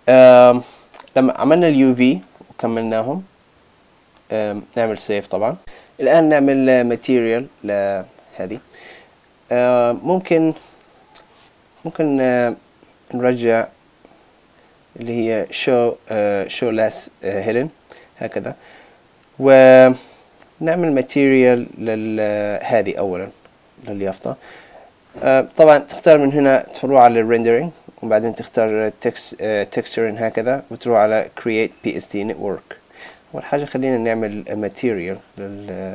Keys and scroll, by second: 5.1 super+s.